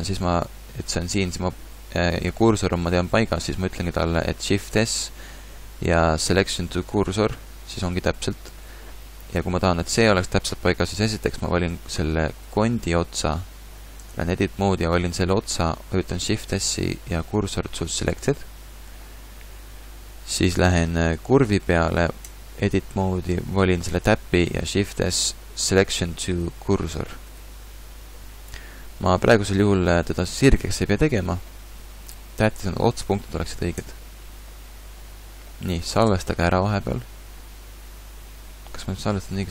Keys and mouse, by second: 0.4 g, 4.7 shift+s, 9.7 g, 12.1 Tab, 14.0 Tab, 16.4 shift+s, 20.4 Tab, 22.2 Tab, 24.8 shift+s, 33.8 Tab, 36.0 ctrl+s.